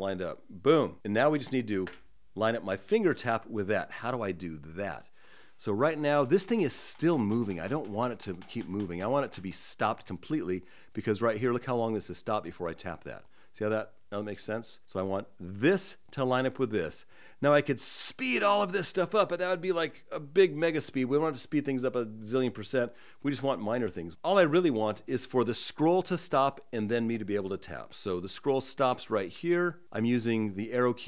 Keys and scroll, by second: 5.6 Right, 6.1 Right, 6.6 Right, 8.2 Right, 8.8 Right, 9.3 Right, 28.7 Left, 29.2 Left, 30.7 Right.